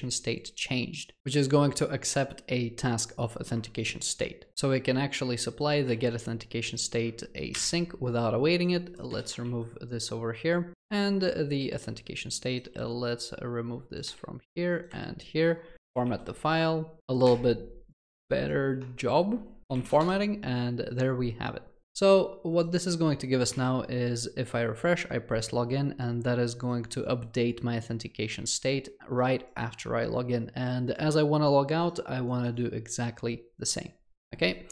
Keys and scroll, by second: 3.5 Return, 5.9 ctrl+c, 9.1 ctrl+v, 15.9 ctrl+alt+l, 19.6 ctrl+alt+l.